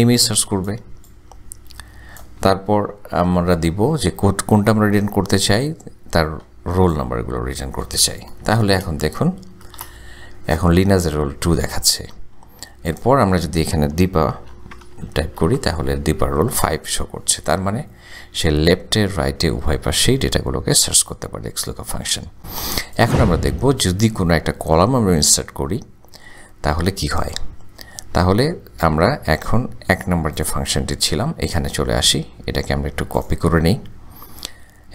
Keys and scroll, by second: 3.2 ,, 8.7 shift+0, 9.8 Return, 14.3-15.7 typing.